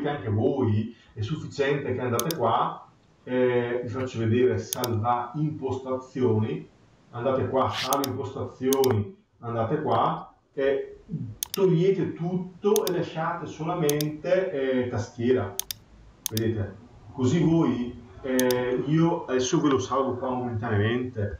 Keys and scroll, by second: 21.1 Left.